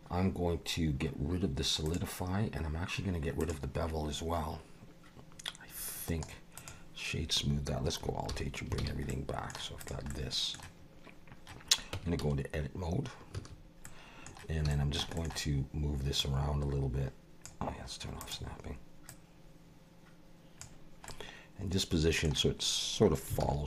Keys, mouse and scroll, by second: 1.9 click, 3.4 click, 6.1 right click, 8.3 alt+h, 8.8 alt+a, 9.1 middle click, 9.8 click, 10.1 middle click, 11.2-11.9 scroll down 1, 11.9 Tab, 13.3 a, 13.8 middle click, 14.7 shift+middle click, 15.1 middle click, 15.2-16.2 scroll up 1, 16.2 click, 18.2 click, 19.1 click, 21.1 middle click, 23.4 alt+a.